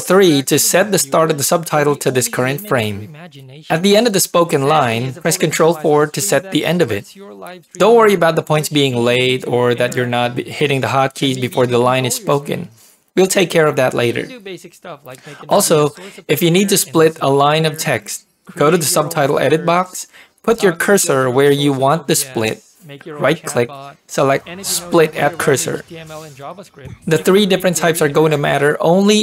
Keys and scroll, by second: 0.8 ctrl+3, 4.2 ctrl+4, 10.9 ctrl+3, 13.2 ctrl+4, 18.0 ctrl+p.